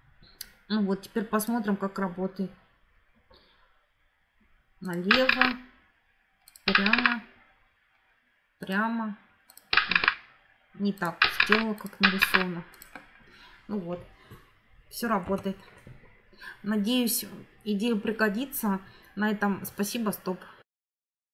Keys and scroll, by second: 15.1 Escape.